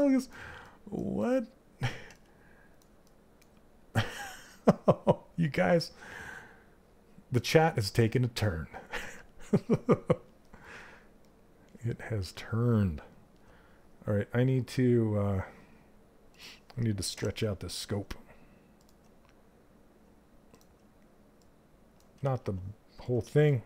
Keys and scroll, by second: 21.7 ctrl+z.